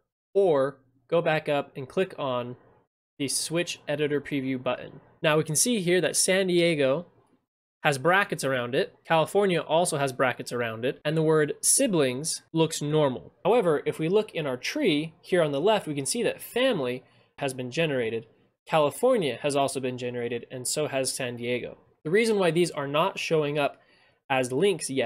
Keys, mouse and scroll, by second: 8.8 click, 10.1 click, 12.3-12.8 drag, 22.0 click.